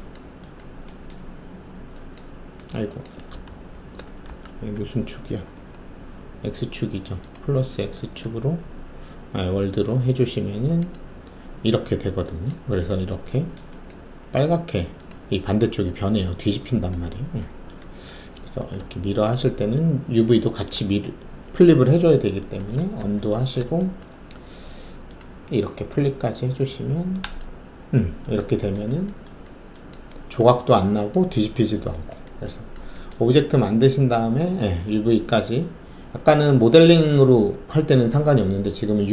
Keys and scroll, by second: 3.4 ctrl+alt+z, 4.2 w, 4.9 alt+`, 5.3 alt+`, 19.2 ctrl+alt+z, 22.9 ctrl+alt+z.